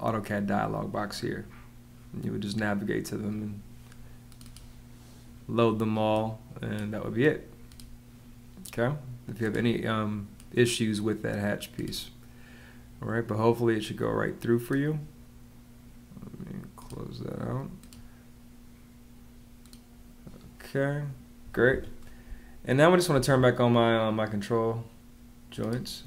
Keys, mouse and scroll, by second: 21.6 Escape, 22.1 space.